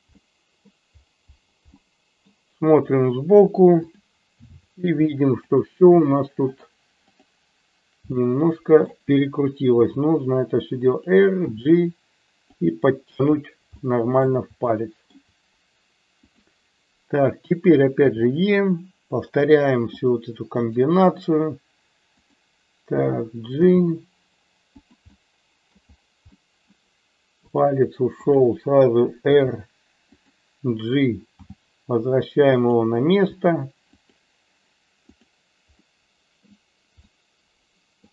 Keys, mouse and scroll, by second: 0.0 middle click, 1.8 middle click, 7.1 shift+click, 8.2 middle click, 9.8 r, 10.9 click, 11.4 g, 12.5 click, 13.8 middle click, 14.8 shift+middle click, 16.3 click, 18.2 e, 19.4 click, 19.9 click, 20.7 right click, 22.3 click, 23.5 g, 24.8 click, 25.1 middle click, 26.3 middle click, 27.6 click, 28.3 shift+click, 29.3 r, 30.2 click, 31.4 g, 32.6 click, 33.3 r, 33.9 click, 35.2 click, 35.8 middle click, 36.9 middle click.